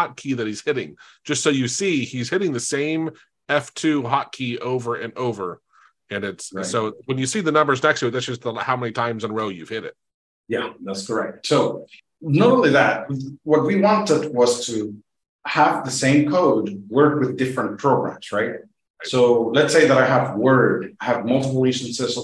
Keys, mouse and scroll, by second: 3.8 click, 5.2 F2, 5.5 F2, 6.0 F2, 6.3 F2, 6.4 F2, 6.7 F2, 7.0 F2, 7.2 F2.